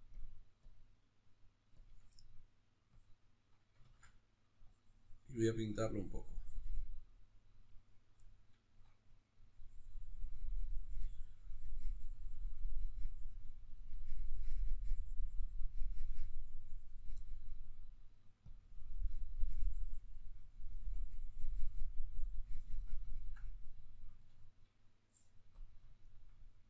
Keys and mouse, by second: 2.1 middle click, 2.9-8.2 drag, 3.9 ctrl+z, 8.2 middle click, 9.1-17.2 drag, 17.2-18.5 middle drag, 18.5-22.8 drag, 22.8-25.5 middle drag, 25.5 click, 26.0-26.6 ctrl+middle drag.